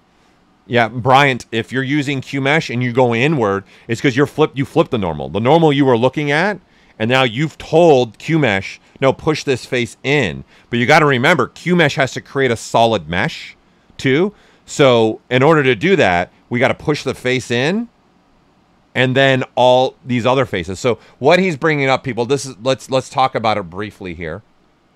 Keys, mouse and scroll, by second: 21.1-24.9 drag, 21.1 typing.